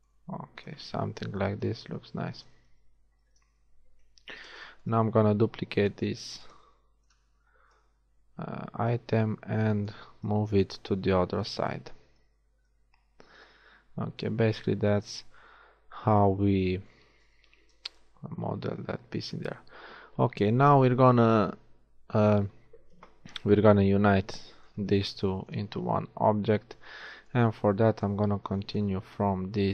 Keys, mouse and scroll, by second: 0.7 KP_1, 1.9 a, 3.3 ctrl+z, 4.4 z, 6.2 shift+d, 10.7 z, 11.6 a, 12.5 Tab, 18.1 KP_1, 19.8 z, 26.7 Tab, 28.3 z.